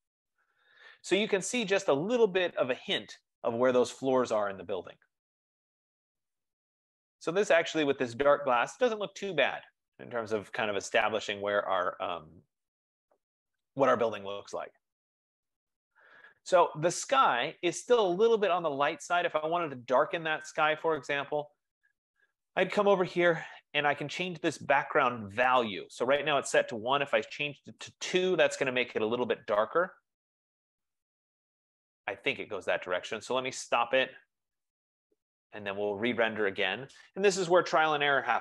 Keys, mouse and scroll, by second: 22.5 click, 25.2 click, 27.0 BackSpace, 27.7 BackSpace, 27.9 Tab, 34.0-38.4 drag.